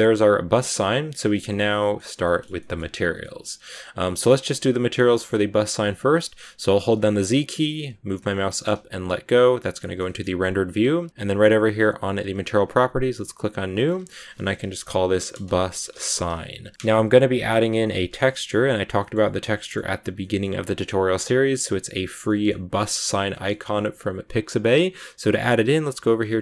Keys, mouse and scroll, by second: 2.0 a, 2.1-4.4 middle drag, 4.4 right click, 5.0-6.8 shift+middle drag, 6.8 z, 9.7-11.1 shift+middle drag, 11.1 click, 12.9-16.7 drag, 17.5-26.4 middle drag, 17.8 scroll up 1.